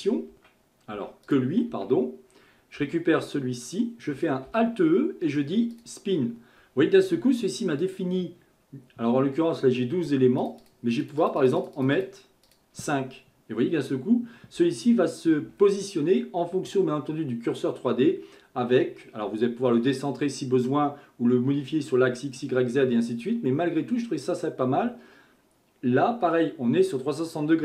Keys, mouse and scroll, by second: 0.3 Tab, 1.3 click, 2.8 a, 4.5 alt+e, 10.4 click, 10.6 click, 11.0-15.5 drag.